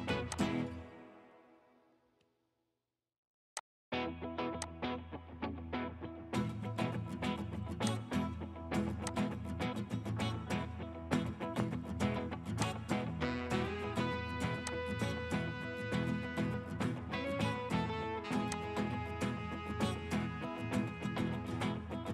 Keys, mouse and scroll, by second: 10.7 scroll down 1, 13.3 scroll up 1, 16.3 scroll up 1, 20.1 right click, 20.4-21.0 scroll down 1.